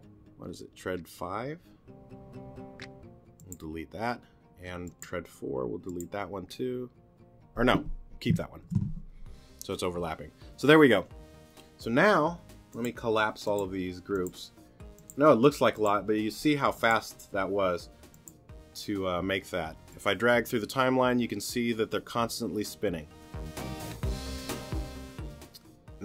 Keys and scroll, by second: 8.6 super+z, 9.6 super+z.